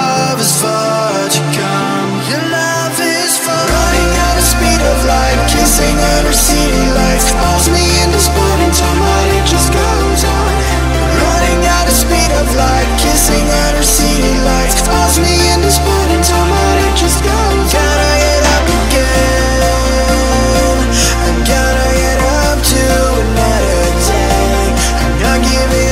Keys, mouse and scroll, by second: 3.2-3.7 scroll up 1, 3.7 click, 4.7-7.0 typing, 7.8-11.2 drag, 12.4 right click, 12.8 scroll down 1, 13.1 right click, 13.6 scroll up 1, 13.9 Tab, 15.8 click, 17.7-19.0 typing, 20.5-23.7 drag, 24.3 F11, 24.6 right click, 25.0-25.5 scroll down 1, 25.5 right click.